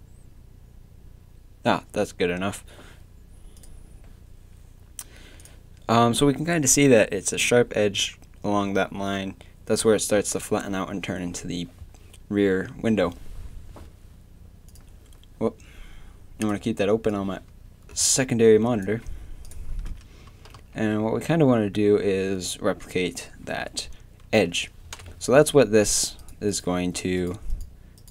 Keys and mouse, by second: 20.3 Tab, 20.6 z, 24.2 Tab, 25.0 KP_7, 25.3 z.